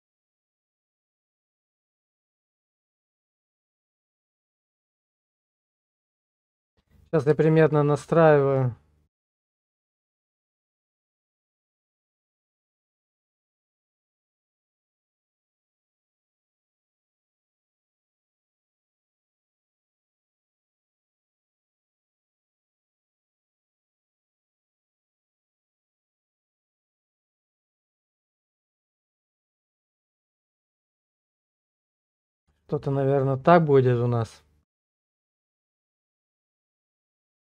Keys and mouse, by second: 4.2 shift+middle click, 5.3 shift+middle click, 6.0 middle click, 6.5 shift+middle click, 7.0 middle click, 7.5 shift+middle click, 12.9 click, 16.7 click, 27.3-29.3 middle drag, 29.6 shift+click, 30.2 click, 31.5 shift+click, 33.3-35.5 drag.